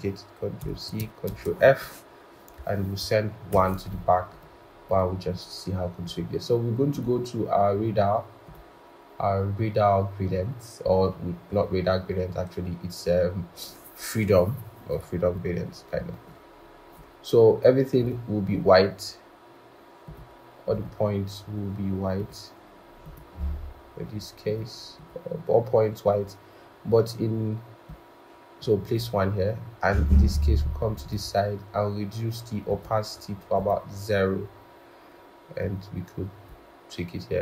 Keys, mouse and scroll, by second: 0.5 ctrl+c, 1.2 ctrl+f, 3.4 ctrl+shift+[, 10.9-11.4 scroll.